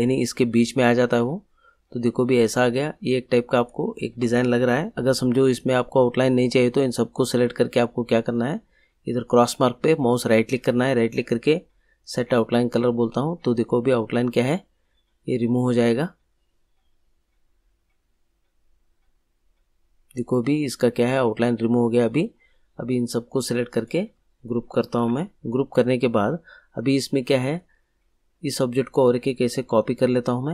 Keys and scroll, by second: 24.9 ctrl+g.